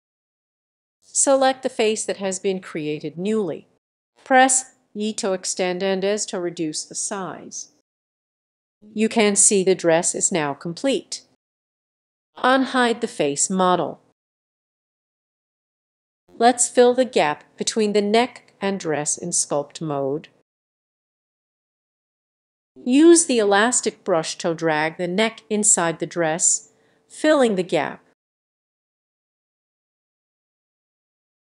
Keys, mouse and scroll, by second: 2.4 click, 5.1 e, 5.8-7.7 drag, 8.1 s, 11.1-12.3 drag, 12.8 middle click, 14.1 click, 14.8 click, 16.3 click, 18.8 click, 21.0 click, 22.3 f, 23.2 click, 26.9 click, 27.2-27.8 scroll down 1, 30.0-30.5 scroll up 2.